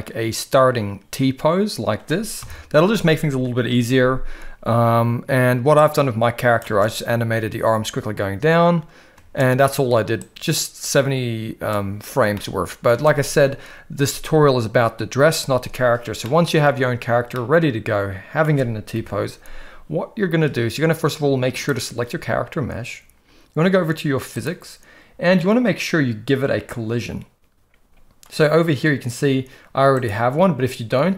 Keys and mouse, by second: 2.4 KP_1, 5.8-6.6 drag, 6.6 space, 9.1 space, 10.2-11.7 drag, 12.3-12.8 middle drag, 16.2-16.6 middle drag, 17.3-18.4 middle drag, 18.9 KP_1, 21.6 drag, 24.4 click.